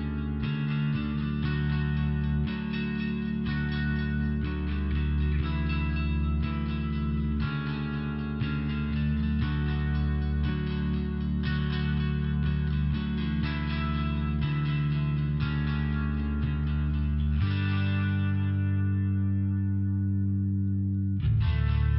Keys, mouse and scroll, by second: 0.6 click, 2.3 click, 4.0 click, 4.7 click, 5.7 click, 9.1 click, 10.3 click, 11.3 click, 12.9 click, 13.6 click, 14.5 click, 15.7 click, 17.6 click, 21.7 click.